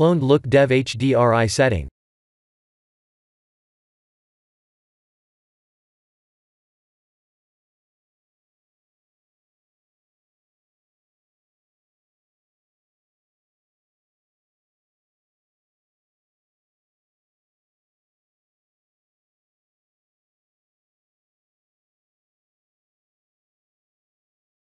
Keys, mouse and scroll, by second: 6.0 middle click, 7.5 middle click, 9.4 middle click, 10.8 KP_0, 12.1 middle click, 12.3 middle click, 12.7 middle click, 12.9 middle click, 15.2 middle click, 17.8 middle click, 23.9 ctrl+alt+KP_0.